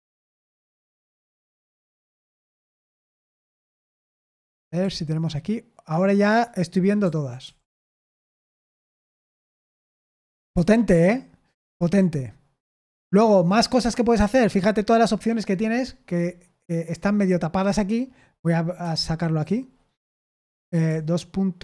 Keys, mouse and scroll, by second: 0.5 Down, 1.0 Down, 1.5 Down, 1.9 Down, 2.3 Down, 3.5 Down, 4.4 Down, 4.7 Down, 7.0 Down, 7.4 Up, 8.9 Tab, 9.8 q, 10.5 Escape, 10.8 Escape, 18.8 Escape, 18.8 click.